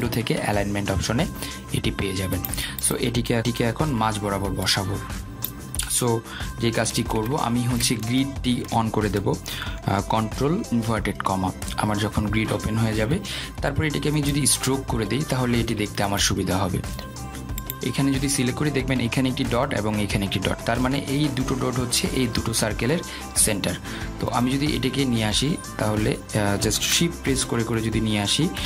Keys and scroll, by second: 10.6 ctrl+', 28.3 shift+Down.